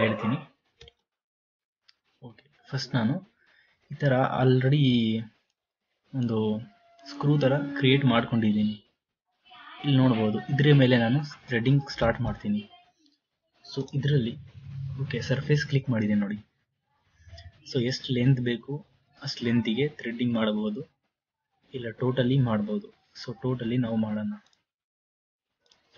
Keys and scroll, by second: 1.0 ctrl+z.